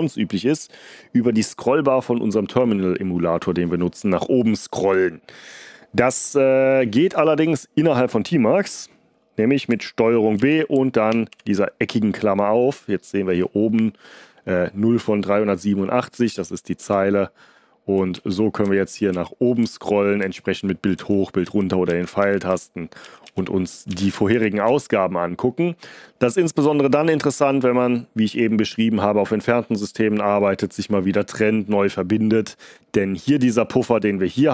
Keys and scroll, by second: 10.3 ctrl+b, 11.0 [, 16.7 Up, 17.4-18.0 Up, 18.1 Page_Up, 18.6 Page_Up, 19.0 Page_Up, 19.5 Page_Up, 20.1 Page_Up, 20.9 Page_Down, 21.4 Page_Up, 21.8 Page_Up, 23.0 Page_Up, 23.2 Page_Up, 23.8 b.